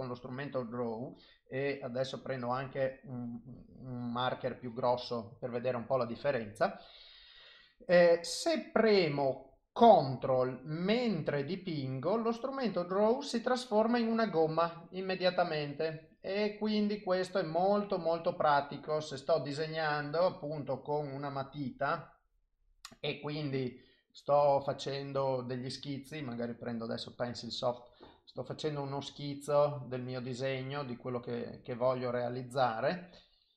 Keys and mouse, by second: 1.3 click, 2.7 click, 3.2 click, 4.4 click, 4.6 click, 10.7 ctrl+click, 15.3 ctrl+click, 17.0 ctrl+click, 21.1 click, 24.1 click, 25.0 click, 27.5 click, 28.4 click, 29.2 click, 29.5 click, 29.7 click, 30.2 click, 31.1 click, 31.4 click, 32.2 click, 33.3 click.